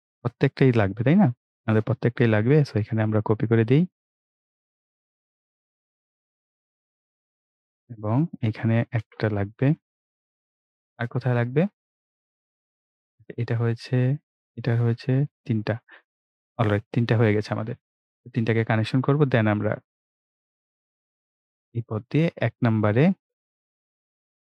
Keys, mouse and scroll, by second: 0.0 scroll down 1, 2.4 ctrl+v, 6.1 click, 7.3 scroll down 1, 9.0 ctrl+v, 9.9 click, 10.6 scroll up 1, 12.4 click, 15.2-15.5 scroll down 1, 18.6 click.